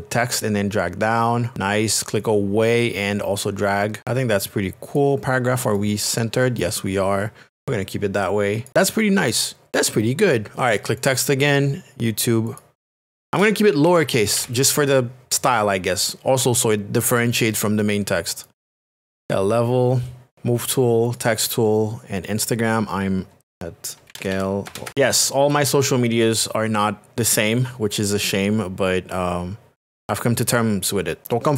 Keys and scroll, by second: 13.2-15.3 typing, 23.7-24.9 typing.